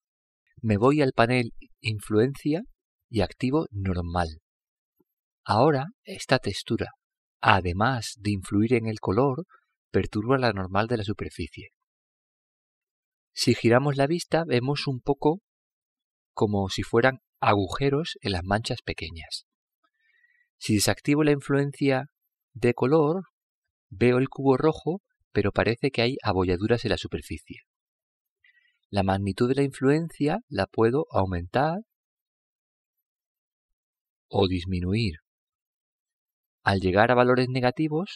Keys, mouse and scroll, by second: 1.4 click, 4.9 click, 7.9 middle drag, 18.7-20.4 middle drag, 22.2 click, 25.2-26.8 middle drag, 27.0 middle drag, 31.2 click.